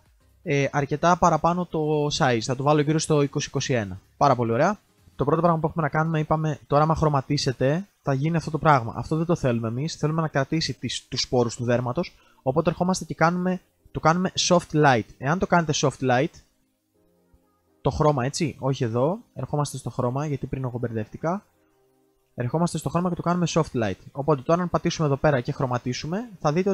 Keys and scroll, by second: 8.9 ctrl+x, 16.4 ctrl+z, 16.7 ctrl+z.